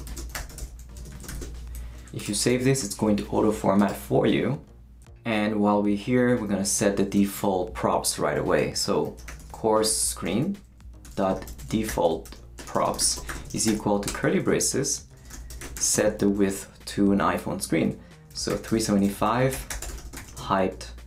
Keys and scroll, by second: 0.0-1.3 typing, 2.3 shift+super+., 2.5 super+s, 7.1 Return, 8.8-16.8 typing, 14.8 Return, 18.1-21.0 typing.